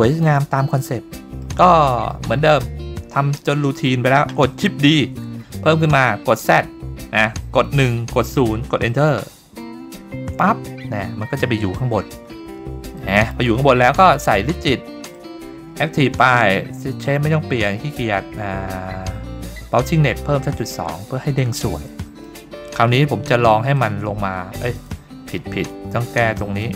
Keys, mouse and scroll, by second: 1.1-1.5 middle drag, 1.9 middle click, 2.1 click, 2.4-2.9 scroll down 2, 3.2 middle click, 3.6 middle click, 5.0 shift+d, 12.0-12.9 scroll down 5, 13.0-13.3 shift+middle drag, 13.5 scroll up 2, 15.0 click, 18.2-19.6 scroll down 2, 19.6-21.5 drag, 21.9 middle click, 23.8 click, 25.6-26.4 scroll up 2, 26.6 click.